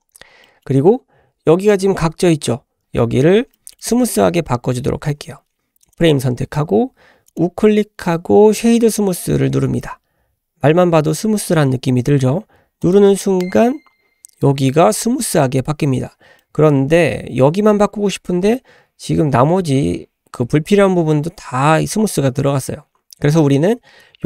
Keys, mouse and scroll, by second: 0.4 middle click, 0.8-1.8 scroll down 1, 3.8 scroll down 1, 4.0 middle click, 5.5-5.8 scroll up 1, 5.8 click, 7.3-13.5 right drag, 14.0-14.8 scroll up 1, 16.5 middle click, 18.2-19.5 scroll up 1.